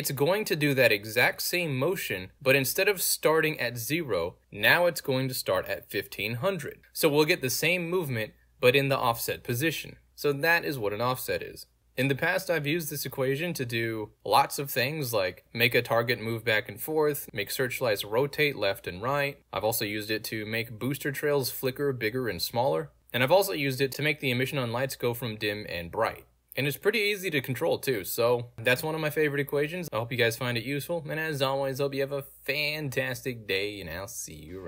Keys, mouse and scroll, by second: 3.1 alt+right click, 3.8 alt+click, 5.0-8.1 drag, 8.3 space, 9.6 space, 11.1 w, 11.6 w, 16.8 w, 18.1 w, 20.5 right click, 21.7 s, 25.2 s, 26.2 s, 26.6 s, 27.2 s, 29.4 a, 29.5 space.